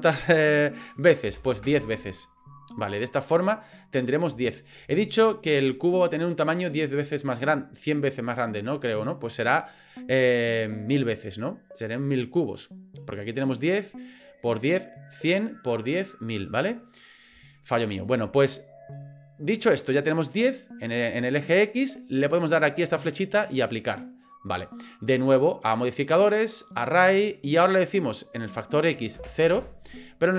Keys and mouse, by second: 3.0-3.8 middle drag, 4.5 shift+middle drag, 17.6 shift+middle click, 23.0-23.7 drag, 24.9-26.7 drag, 27.8-30.2 drag.